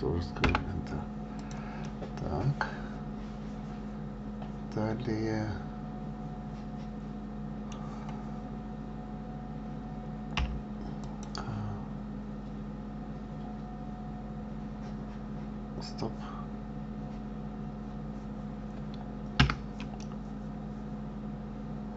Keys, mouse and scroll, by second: 1.7 click, 2.1-5.2 middle drag, 10.7 k, 20.3-21.9 middle drag.